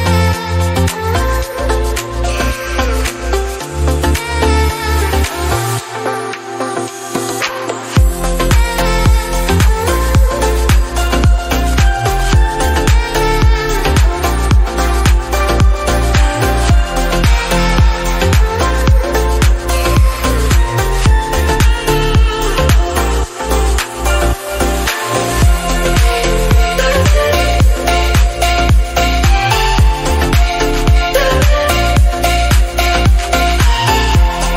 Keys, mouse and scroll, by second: 0.5 middle click, 0.8 click, 1.2-4.8 drag, 8.2 click, 10.1-10.4 scroll down 1, 10.4 click, 11.1 click, 13.2 middle click, 13.9-15.1 drag, 15.6 middle click, 15.8 scroll up 1, 16.0 shift+middle click, 16.7 click, 19.0 click, 22.4-24.1 drag, 24.1-24.7 scroll down 1, 24.7 scroll up 1, 25.0-26.2 middle drag, 26.2 scroll down 2, 26.3 middle click, 27.1 scroll up 1, 27.4 click, 28.5 click, 29.3 middle click, 30.2 click, 31.6-31.9 scroll down 1, 31.9-33.0 scroll up 5, 33.0-34.2 drag, 34.2 scroll down 2, 34.4-34.5 middle drag.